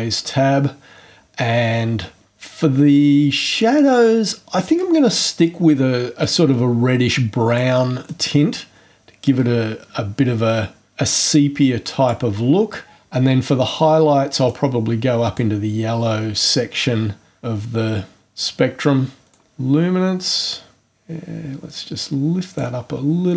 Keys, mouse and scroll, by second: 6.2 click, 8.0 click, 14.5 click, 16.5-22.8 drag.